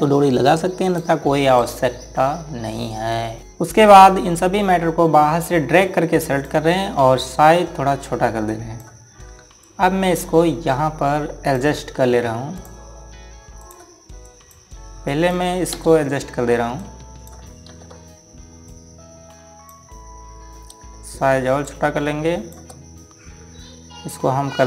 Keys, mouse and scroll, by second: 1.6 right click, 3.4 scroll up 1, 6.2 click, 16.5 space, 17.5 click, 18.4 ctrl+z, 19.4 click, 22.4 shift+click.